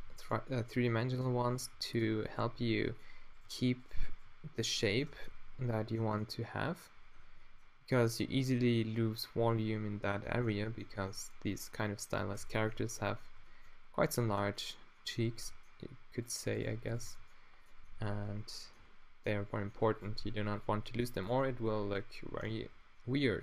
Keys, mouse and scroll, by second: 0.0-2.4 typing, 3.5 g, 4.1 g, 5.1 Tab, 12.4 Tab, 12.8 Tab, 15.4 Tab, 16.2 middle click, 17.1 click, 17.1 g, 19.5 g, 20.6 r, 20.7 g.